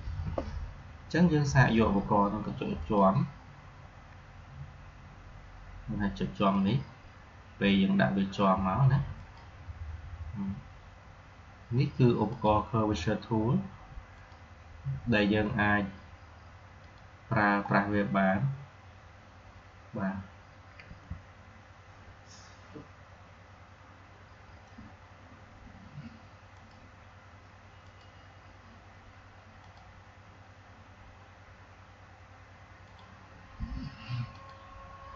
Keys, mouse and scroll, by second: 2.7 click, 6.5 click, 6.5 click, 12.2 click, 16.7 click, 17.7-18.5 scroll down 1, 20.8 Escape, 26.5 click, 32.8 click.